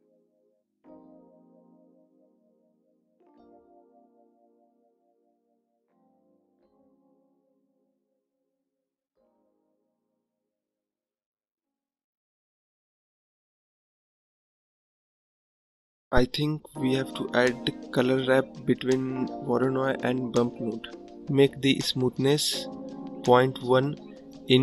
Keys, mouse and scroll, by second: 6.4-9.2 drag, 10.5-13.0 drag, 13.0 scroll up 1, 16.3-18.4 drag, 20.2-22.4 drag.